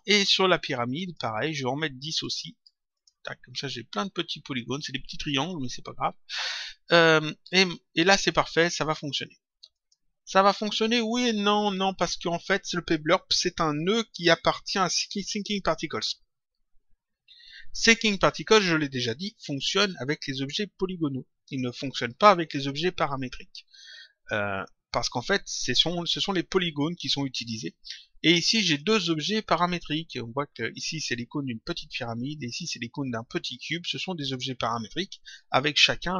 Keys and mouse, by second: 0.9 click, 2.2 click, 9.7 click, 28.7 click, 30.8 click, 32.4 click.